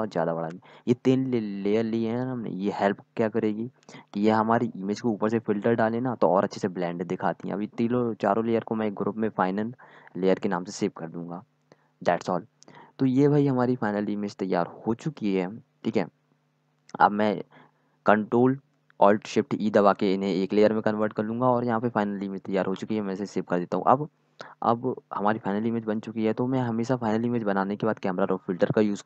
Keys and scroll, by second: 10.9-14.0 typing, 16.5 ctrl+alt+shift+e, 20.4-21.5 typing, 23.4 ctrl+s, 23.9 typing, 25.3-28.2 typing.